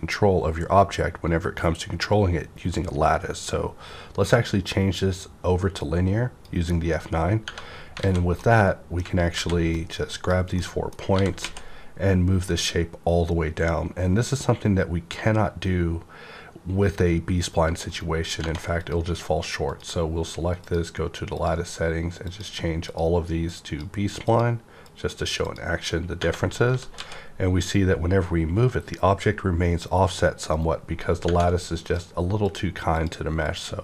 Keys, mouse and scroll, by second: 5.8-8.0 drag, 7.4 Tab, 8.0 alt+a, 8.4-9.6 middle drag, 9.3 alt+a, 9.6-11.1 drag, 10.6-13.6 middle drag, 11.1-11.4 typing, 17.9 right click, 17.9 right click, 17.9 typing, 18.3 Tab, 18.7 click, 19.7-25.4 drag, 25.4 click, 26.2 Tab, 26.7 typing, 30.5 right click, 30.6 z, 31.2 Tab, 31.8 click, 32.4 click.